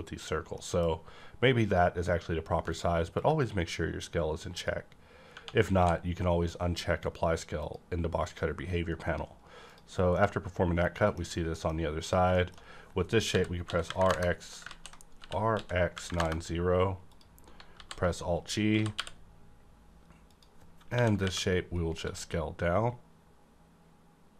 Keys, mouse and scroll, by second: 0.0 middle click, 0.5 middle click, 3.2 click, 3.2-5.7 drag, 5.3 Tab, 5.7 Right, 5.7 d, 7.6 click, 9.6 click, 10.1-11.4 middle drag, 11.2 scroll down 1, 11.4 middle click, 12.0 click, 12.3 shift+middle click, 12.3 click, 13.3-16.0 typing, 14.0 KP_Enter, 16.1 KP_Enter, 17.0 click, 17.6 alt+g, 18.6 alt+g, 19.0 y, 20.2 click, 20.8 KP_1, 21.1 KP_Decimal, 21.9 scroll up 1, 22.0 s.